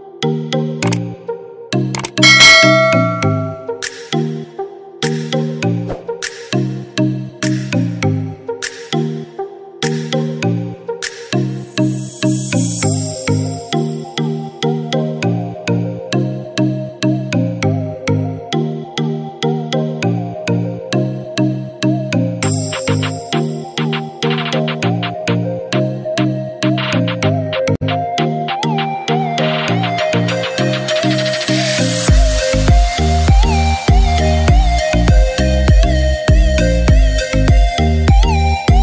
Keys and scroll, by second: 6.5 ctrl+shift+a, 34.8-35.2 typing, 36.7 typing.